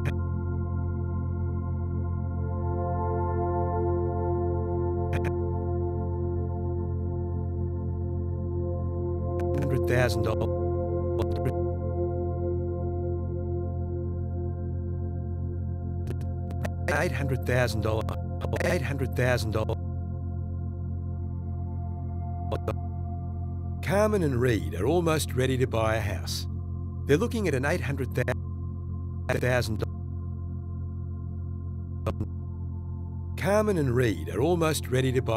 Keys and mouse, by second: 1.2 i, 1.3 click, 5.0 click, 5.6 click, 7.3 shift+d, 8.7-9.7 drag, 9.5 space, 10.3 space, 11.1 click, 12.7 click, 13.7 shift+d, 15.5 click, 16.1 click, 16.5 click, 16.9-19.6 typing, 18.4 click, 18.6 click, 19.0 click, 22.5 click, 22.9 space, 28.1 space, 31.0 ctrl+s, 32.0 click, 32.5 space.